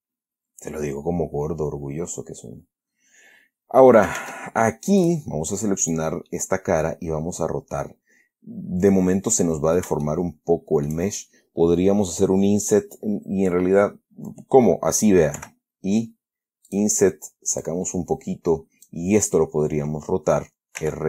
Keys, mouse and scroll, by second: 0.2-4.3 middle drag, 4.5 ctrl+Tab, 5.3 click, 6.1 click, 6.6-10.3 middle drag, 10.4-11.4 shift+middle drag, 15.7 i, 17.0 click, 17.9-19.4 drag.